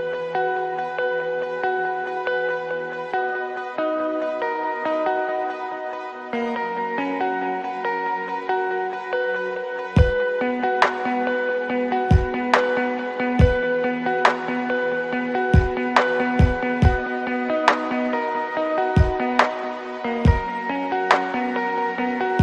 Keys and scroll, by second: 5.8 n, 8.4 Left, 21.2 ctrl+z, 21.7 space.